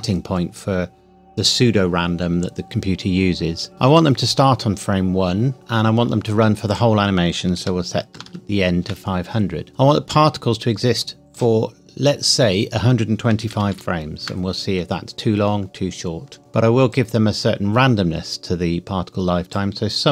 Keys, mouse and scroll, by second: 6.7 click, 7.6 KP_5, 8.1 KP_0, 8.8 KP_Enter, 11.3 click, 13.3 KP_1, 13.5 KP_2, 13.7 KP_5, 14.2 KP_Enter, 16.9 click.